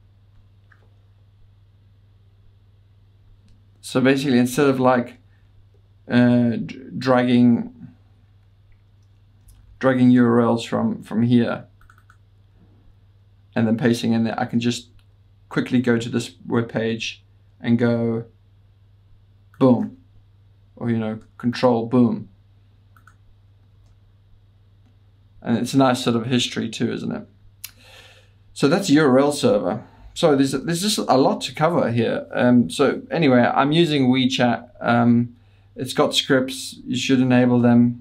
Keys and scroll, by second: 5.0 super+9, 8.9-10.2 typing, 15.6 super+Tab, 23.8 ctrl+w.